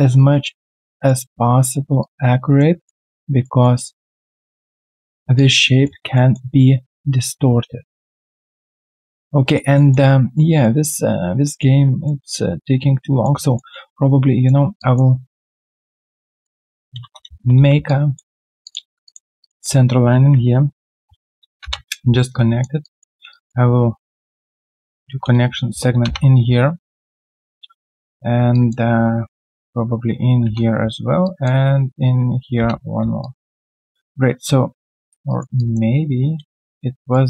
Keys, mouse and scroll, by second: 0.2-0.6 alt+scroll down 1, 0.6 alt+right click, 2.8 alt+middle click, 3.2 alt+right click, 3.6 alt+middle click, 3.9 alt+right click, 4.3 alt+middle click, 5.7 alt+right click, 6.1 alt+middle click, 9.4 alt+right click, 9.7 alt+middle click, 10.1 alt+right click, 10.6 alt+middle click, 10.9-11.4 alt+scroll down 1, 11.4 alt+right click, 12.0 middle click, 13.4 alt+right click, 13.7 typing, 14.0 right click, 14.7 alt+click, 15.4 right click, 17.0 space, 17.4 space, 17.8 alt+click, 19.0 double click, 19.4 shift+click, 19.5 shift+double click, 21.6 Return, 22.3 alt+click, 24.9 ctrl+alt+q, 26.0 Return, 29.8 ctrl+alt+q, 30.4 Return, 31.9 Return, 32.0 ctrl+alt+w, 32.5 Return, 33.2 alt+click, 34.8 alt+click, 35.3 alt+right click, 35.5 alt+click, 36.3 q, 36.7 right click.